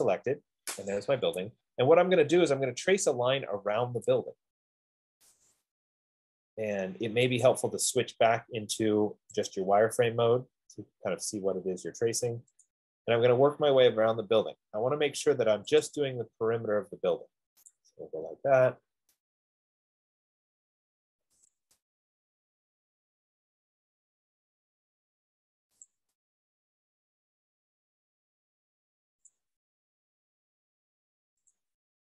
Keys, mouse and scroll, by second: 0.0-0.1 typing, 1.2 Escape, 5.8 click, 7.7 click, 9.9 click, 13.0 click, 13.9-14.3 scroll, 16.0 click, 18.0 click, 18.4 middle click, 19.1 middle click, 19.3 middle click, 19.4 middle click, 19.6 scroll, 19.8 scroll down 5, 19.9-20.4 scroll down 4, 21.9 click, 22.3-22.6 scroll up 3, 22.5 F15, 22.7-23.0 scroll, 23.1-23.4 scroll up 5, 24.0-24.5 scroll, 26.1 click, 26.5-26.8 scroll, 27.5-27.9 scroll, 28.1 scroll down 8, 29.9 click, 31.9 click.